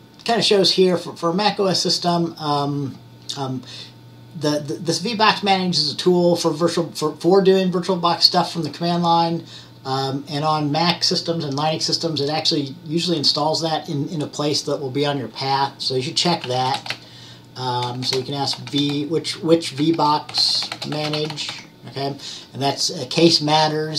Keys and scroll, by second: 16.3-21.9 typing.